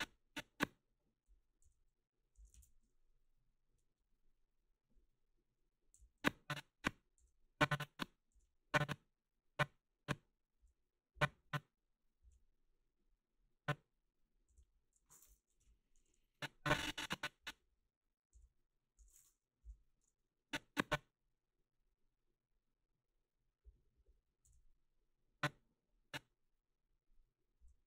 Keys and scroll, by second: 1.6 g, 6.0 g, 7.2 g, 8.3 g, 10.6 g, 12.2 g, 14.5 g, 15.7 Delete, 18.4 g, 19.7 Delete, 24.5 g, 27.6 g.